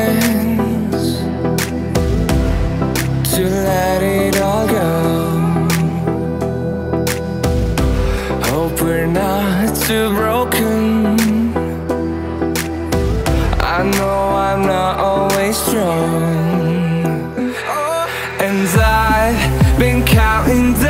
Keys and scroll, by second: 19.7 ctrl+j.